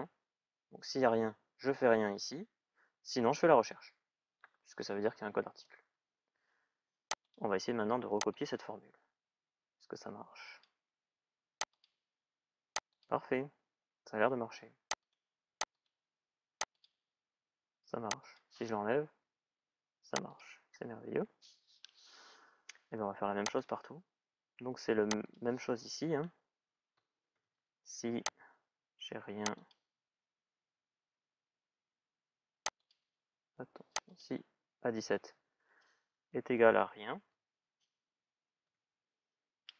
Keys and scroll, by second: 5.2 Return, 18.9 Delete, 26.7 shift+s, 27.0 shift+i.